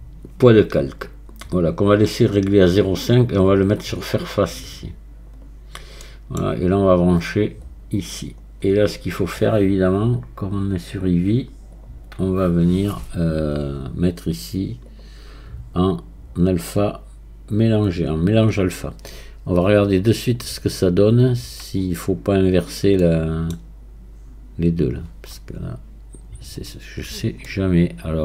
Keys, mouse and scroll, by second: 6.0-7.7 middle drag, 7.7-9.7 drag, 9.7 scroll down 1, 10.6-11.9 scroll down 1, 11.9 click, 12.4 scroll down 1, 14.9-23.0 drag, 23.0-26.0 middle drag, 27.0 scroll up 3, 27.5-28.2 middle drag.